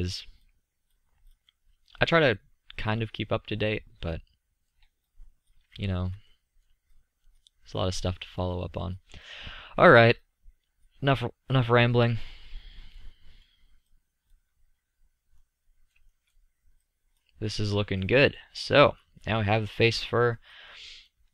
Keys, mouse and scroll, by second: 0.2-1.6 middle drag, 5.1 middle click, 5.3 middle drag, 5.4 middle drag, 6.4 middle click, 6.6 middle click, 7.2 drag, 8.5-10.4 drag, 12.8 drag, 13.1-13.8 middle drag, 14.6-16.1 drag, 16.8 middle click, 17.1-17.5 middle drag, 17.5 click, 18.2 middle click.